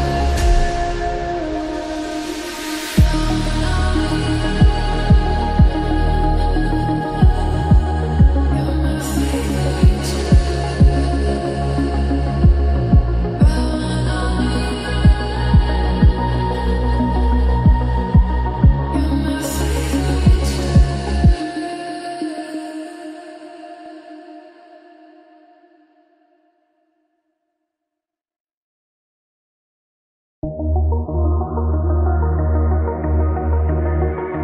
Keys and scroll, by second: 2.2 typing, 5.4-6.8 typing, 20.0 alt+BackSpace, 21.9 ctrl+d.